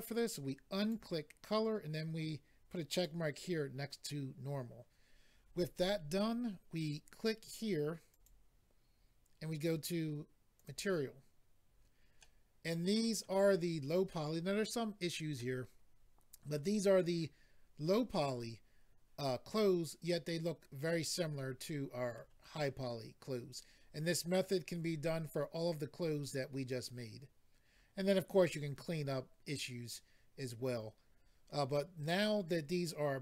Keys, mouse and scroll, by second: 0.8 click, 0.9 click, 2.9 click, 3.0 click, 8.1 click, 8.2 click, 10.5 click, 10.6 click, 14.1 middle click, 15.3 middle click, 20.2 middle click.